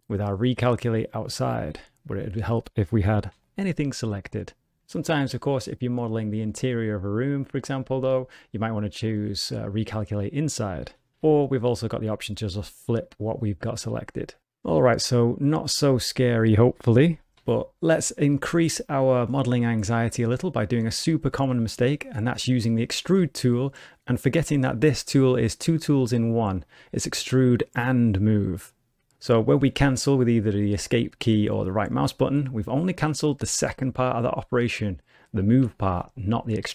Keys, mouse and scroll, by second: 2.1 a, 3.3 alt+n, 6.4 middle click, 7.9 a, 11.1 alt+n, 13.5 middle click, 13.7 ctrl+middle click, 14.0 shift+middle click, 14.1 alt+a, 14.2 middle click, 15.7 middle click, 16.3 a, 17.3 alt+n, 20.0 middle click, 20.7 click, 21.1 scroll down 1, 21.4 shift+middle click, 21.9 middle click, 23.1 e, 26.9 click, 33.2 middle click, 35.7 shift+middle click, 36.6 scroll up 1.